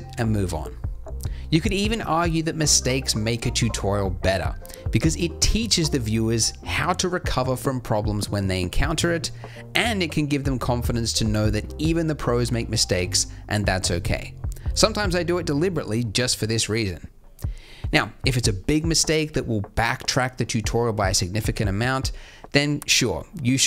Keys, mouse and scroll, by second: 1.3 alt+a, 1.3 z, 5.7 shift+a, 10.9 t, 12.3 t, 12.5-14.2 drag, 14.2 z, 15.0 alt+a, 19.0 Escape, 22.2 z, 22.2 a.